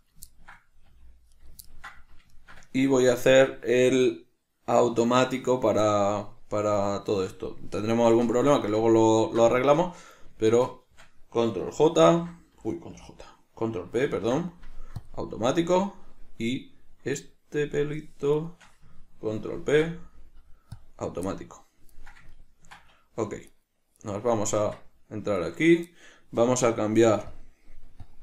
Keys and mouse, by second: 0.3 right click, 0.6-1.7 ctrl+middle drag, 1.1 g, 1.7 right click, 2.0-10.7 ctrl+middle drag, 10.7 shift+right click, 12.2 ctrl+j, 16.8 right click, 17.4 right click, 18.7 shift+right click, 19.8 ctrl+p, 21.6-23.8 middle drag, 23.8 right click, 24.3 right click, 24.8 Tab, 25.7 right click, 27.6 drag.